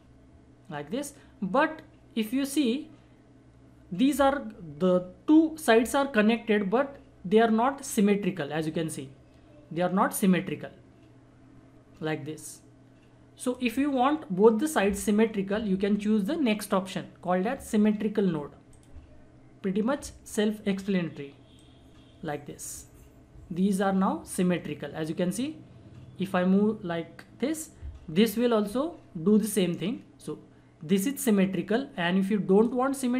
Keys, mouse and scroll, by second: 18.7 click, 21.5-31.6 drag.